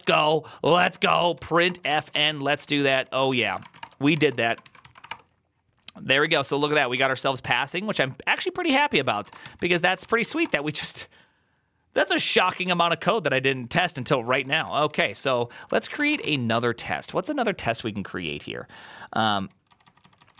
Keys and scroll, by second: 0.0-5.4 typing, 7.8 ctrl+a, 8.2-10.7 typing, 8.6 ctrl+c, 8.7 ctrl+c, 9.9 ctrl+c, 11.9-16.4 typing, 17.8-20.3 typing.